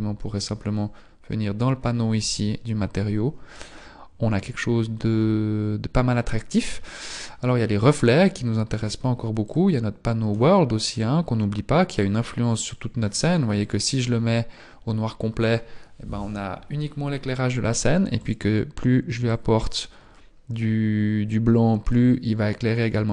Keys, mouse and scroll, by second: 2.5 scroll down 6.